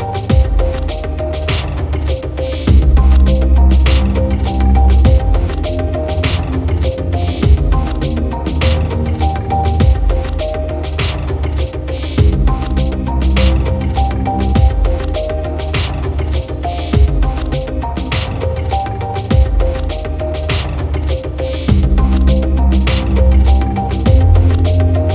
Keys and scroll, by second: 1.0 ctrl+0, 14.0 ctrl+alt+z, 19.0 ctrl+=.